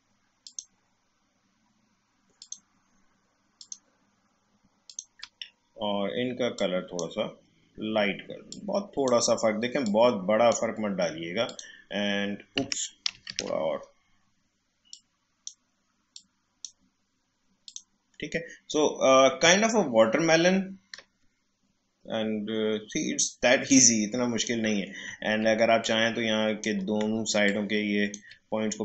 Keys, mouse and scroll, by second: 13.1 ctrl+z, 14.9-17.6 drag, 19.7 alt+scroll up 1, 20.3-20.9 alt+scroll down 1, 23.6-25.8 drag, 25.8-28.8 drag.